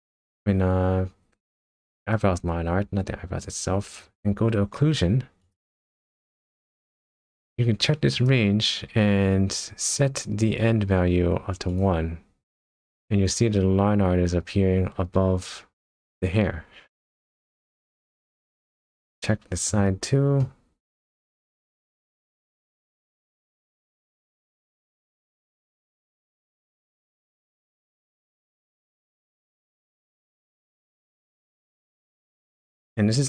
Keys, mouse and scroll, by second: 2.0 click, 5.4 click, 8.2 click, 11.7 click, 13.2 click, 16.6-17.2 scroll down 5, 17.4 middle click, 18.8 shift+middle click, 20.4 middle click, 21.5 shift+middle click, 22.1 middle click, 25.0 shift+middle click, 26.4 middle click, 29.1 shift+middle click, 29.8 scroll up 1, 30.1-30.4 scroll down 5, 30.7 shift+middle click, 31.1 middle click, 32.5-32.9 scroll down 1, 32.9-33.2 scroll up 4.